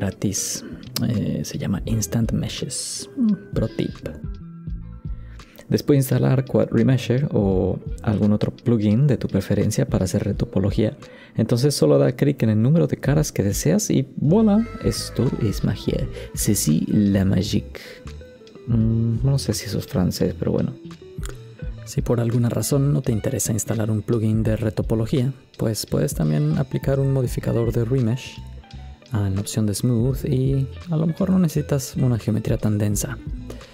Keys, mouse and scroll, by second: 0.2 click, 0.7 scroll down 2, 1.4 click, 2.9 n, 3.8 click, 5.8 click, 8.0 KP_1, 9.2 BackSpace, 10.2 KP_0, 13.0 click, 14.2 shift+middle click, 14.2 scroll up 3, 15.7 KP_Decimal, 15.9 middle click, 20.2 shift+middle click.